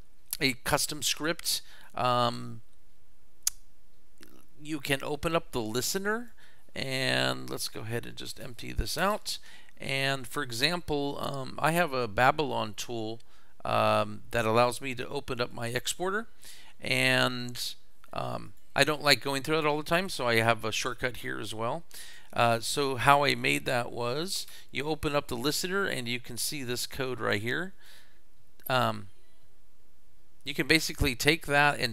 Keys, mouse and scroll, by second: 4.9 click, 6.0 click, 7.3 click, 8.6 click, 10.1 click, 13.9 click, 15.5 click, 18.5 click, 20.8 click, 22.1 click, 23.3-24.3 drag, 26.9 click, 29.0-31.9 drag.